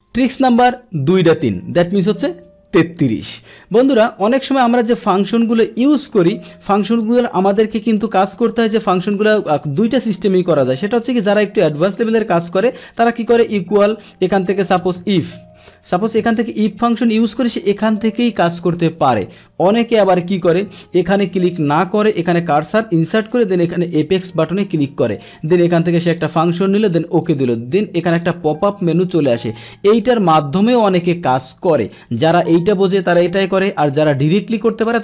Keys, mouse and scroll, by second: 3.0 click, 3.7 click, 4.7 middle click, 5.4 click, 7.1-7.8 drag, 8.5 click, 8.7 click, 9.0 click, 9.9 click, 11.3 click, 11.9 click, 15.3 BackSpace, 16.8 Tab, 20.3 BackSpace, 20.7 BackSpace, 21.2 BackSpace, 21.5 click, 22.0 click, 23.5 click, 24.9-25.2 drag, 26.1 click, 26.8 click, 28.2-29.6 drag, 30.0 click, 30.6 click, 31.9 click.